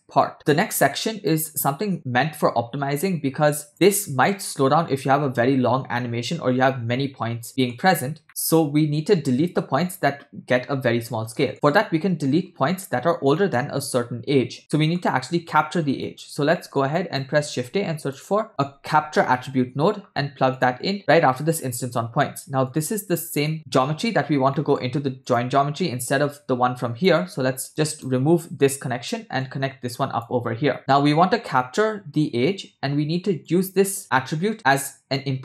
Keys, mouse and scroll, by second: 0.3 click, 0.8 click, 3.5 click, 3.9 click, 7.6 middle click, 7.8-8.2 scroll up 3, 8.2 middle click, 11.4 middle click, 11.5 shift+a, 13.4 middle click, 14.6 scroll down 2, 14.8 middle click, 16.1 click, 16.6 middle click, 17.1-17.4 drag, 17.5 shift+a, 22.7-23.5 drag, 24.5 middle click, 25.3 click, 26.3 click, 27.7 ctrl+right click, 29.4-30.3 drag, 30.8 middle drag, 31.1-31.9 scroll up 3, 33.5-35.4 drag.